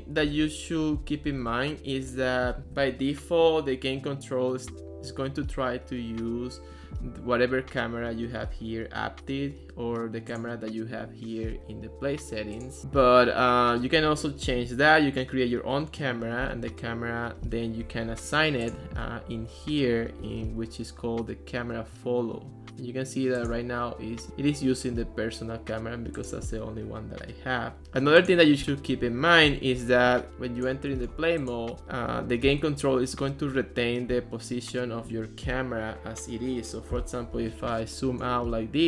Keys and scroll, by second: 0.0-1.5 typing.